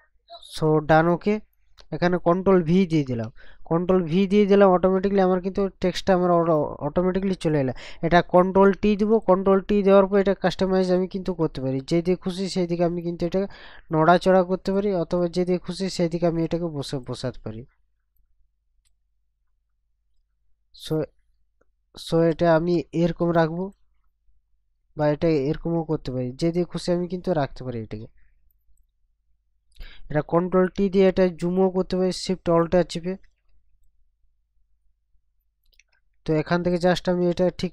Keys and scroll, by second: 2.9 ctrl+v, 8.4 ctrl+t, 30.5 ctrl+t.